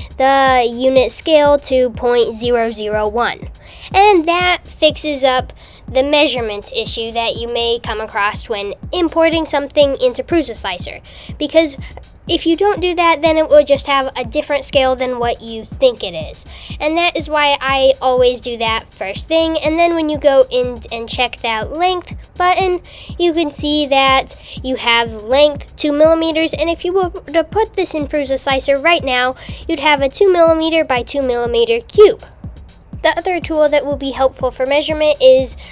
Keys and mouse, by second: 1.5 KP_0, 11.5-12.5 drag, 14.5 Tab, 18.5 click, 34.9 Tab.